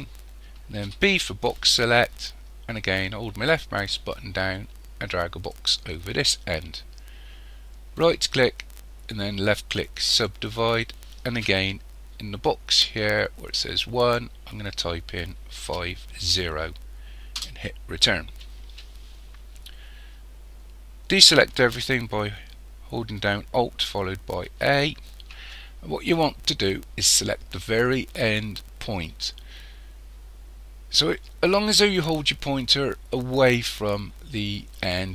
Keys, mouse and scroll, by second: 0.8 b, 7.9-11.0 right drag, 14.0 click, 24.5 alt+a.